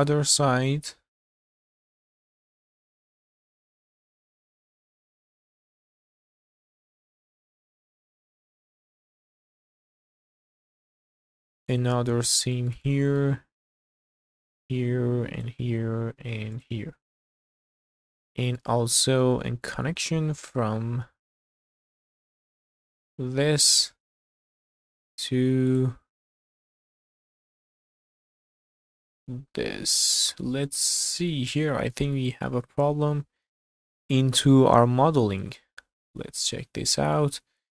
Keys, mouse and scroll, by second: 0.3 scroll up 2, 0.7 shift+middle click, 1.0 scroll up 1, 1.2 shift+middle click, 1.5 alt+click, 1.7 q, 2.0 scroll down 1, 2.2 shift+middle click, 2.3 middle click, 2.5 shift+middle click, 2.7 middle click, 2.8-3.5 scroll up 4, 2.9 shift+middle click, 3.5 shift+middle click, 3.8 click, 4.2 scroll down 1, 4.3 middle click, 4.5 shift+middle click, 4.8 scroll up 3, 5.0 shift+middle click, 5.3 ctrl+click, 5.4 q, 5.6 scroll down 4, 5.9 middle click, 6.3 scroll up 4, 6.8 alt+click, 6.9 middle click, 7.4 alt+shift+click, 7.6 q, 7.8 scroll down 1, 7.9 middle click, 8.3 scroll up 2, 8.4 shift+middle click, 8.6 click, 8.7 shift+middle click, 9.1 ctrl+click, 9.3-10.4 scroll down 2, 9.3 middle click, 9.4 q, 9.7-10.8 middle drag, 10.9-11.5 scroll up 4, 11.0 shift+middle click, 11.7 alt+click, 12.2 scroll down 2, 12.6 shift+middle click, 12.8 middle click, 13.4-13.8 scroll up 2, 14.4 alt+shift+click, 15.3 alt+shift+click, 16.5 alt+shift+click, 17.2 q, 17.9 scroll down 2, 18.2 middle click, 18.8-19.2 scroll up 4, 19.4 shift+middle click, 19.9 middle click, 20.8 scroll up 1, 21.1 shift+middle click, 21.5-22.9 middle drag, 23.8 click, 25.7 ctrl+click, 26.2-27.2 middle drag, 28.7 ctrl+click, 30.1 middle click, 30.9-31.2 scroll up 2, 31.3 shift+middle click, 32.2 middle click, 34.9 scroll up 1, 35.4 Tab, 36.0 scroll down 1, 36.5 Tab, 36.9 middle click, 37.3 1.